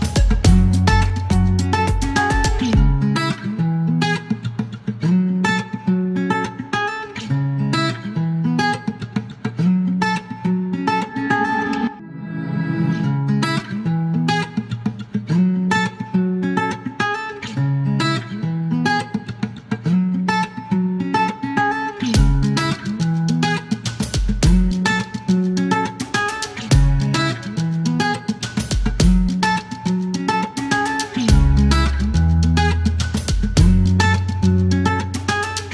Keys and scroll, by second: 0.9 typing, 2.4-2.9 typing, 7.1 m, 8.8 alt+e, 9.7 space, 13.3 KP_6, 13.4 KP_0, 14.4 alt+e, 16.4 alt+m, 16.4 alt+z, 17.2 space, 18.1 ctrl+shift+z, 18.3 typing, 19.5 alt+m, 19.6 alt+z, 23.8 alt+q, 24.9 alt+e, 25.2 alt+e, 27.0 space, 29.8 ctrl+z, 32.6 alt+c, 35.0 ctrl+a.